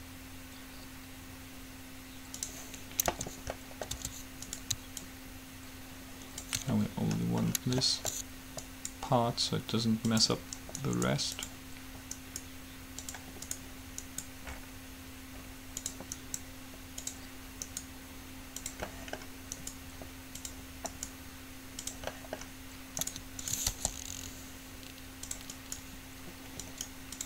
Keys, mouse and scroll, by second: 3.4 Tab, 4.1 Tab, 4.7 right click, 5.2 click, 5.2 middle click, 8.9 middle click, 8.9-10.6 right drag, 10.6 middle click, 11.0-16.1 right drag, 16.4 right click, 17.9-20.1 right drag, 19.0-22.9 drag, 23.2-25.4 right drag, 23.9 g, 25.7-27.2 right drag.